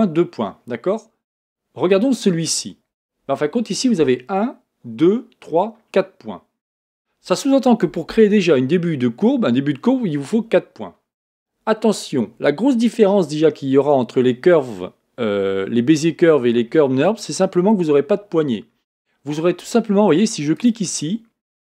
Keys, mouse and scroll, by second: 1.4 Tab, 1.9 click, 2.9 Tab, 20.5 click.